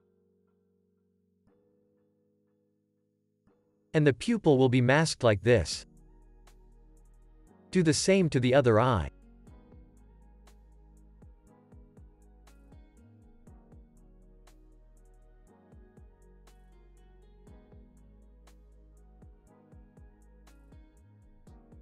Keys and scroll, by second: 6.5 super+z, 7.2 super+s.